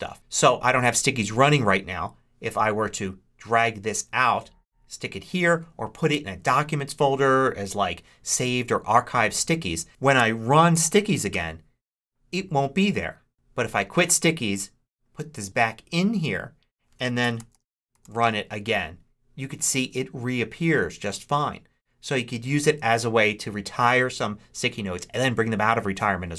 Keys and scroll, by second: 10.6 super+s, 11.2 Return, 13.6 super+q, 17.4-18.4 typing.